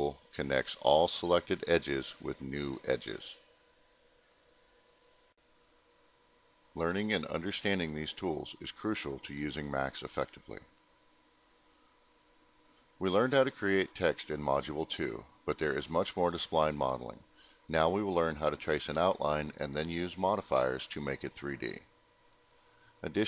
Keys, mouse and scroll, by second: 1.0 shift+click, 1.3 middle click, 2.6 click, 3.7 click, 4.0 click, 4.5 click, 4.8 click, 6.2 click, 6.7 alt+middle click, 7.2 middle click, 7.7 alt+middle click, 9.2 click, 11.8 click, 21.2 click, 22.0 click.